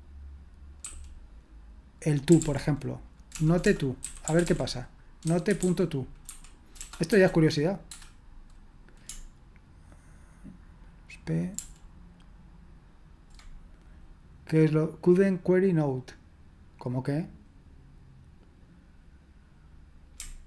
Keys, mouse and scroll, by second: 2.1-7.1 typing, 7.9 Return, 11.6 ctrl+p.